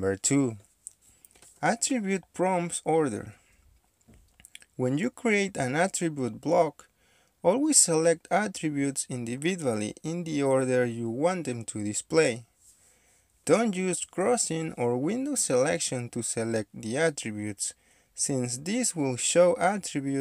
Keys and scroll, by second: 12.7 space, 16.5 d, 16.9 shift+3, 18.9-19.3 typing.